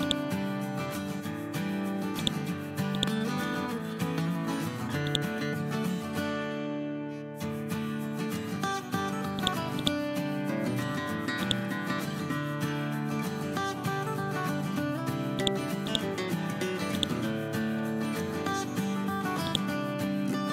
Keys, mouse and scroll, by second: 3.2 scroll down 1, 3.9-5.0 scroll up 1, 5.0-6.2 drag, 7.4 F12, 8.8 Escape, 9.3-10.3 drag, 14.0 scroll up 1, 14.8 scroll down 1, 15.3 click, 16.9 right click, 17.4 scroll up 1, 19.4 right click, 20.3 scroll down 1.